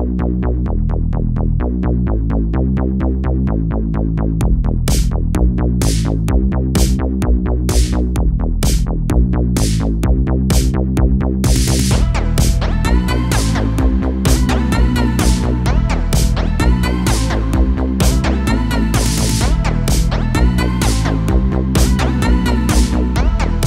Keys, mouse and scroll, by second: 0.2 middle click, 1.1-1.5 scroll down 2, 1.5-4.2 shift+middle drag, 4.2 l, 4.9 KP_4, 5.5-5.9 scroll down 2, 5.9 shift+d, 6.7 g, 7.8 middle click, 8.4-9.2 scroll up 1, 9.2 g, 10.3 a, 10.5 a, 10.9-13.0 middle drag, 13.0 KP_0, 13.6 a, 13.7 a, 14.2 shift+middle click, 14.9-15.3 scroll up 1, 15.3-16.4 shift+middle drag, 16.4 scroll down 1, 16.7 shift+middle click, 17.1-17.7 scroll down 1, 17.7 a, 17.9 a, 18.6 k, 20.0 l, 20.8 g, 23.1 a, 23.2 a.